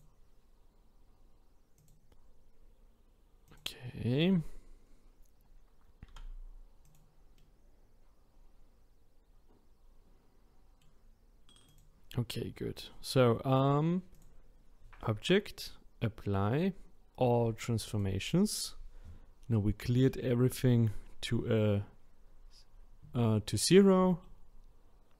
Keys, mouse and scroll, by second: 1.7 click, 3.4 click, 6.0 r, 7.4-11.6 middle drag, 11.6 click, 14.1-17.2 drag, 24.2-25.1 middle drag.